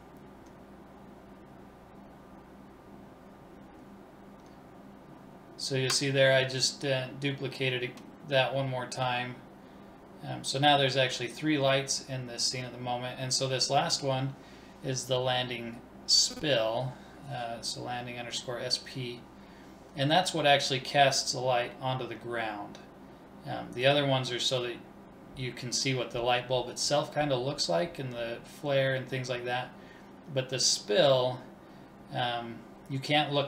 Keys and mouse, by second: 2.1 shift+d, 5.1-7.0 drag, 6.5 BackSpace, 17.9 ctrl+s, 19.6-22.7 drag, 28.3-29.5 drag, 29.5 middle click, 30.1 click.